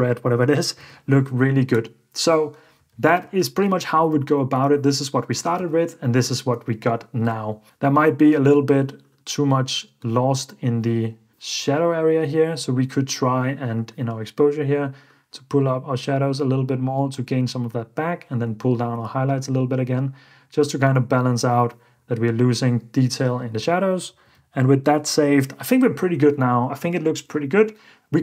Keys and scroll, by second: 0.8 super+f, 2.8 super+f, 3.2 alt+d, 3.6 super+f, 4.1 alt+d, 4.7 alt+d, 5.5 alt+d, 7.2 ↺, 23.5 super+f, 24.1 super+d.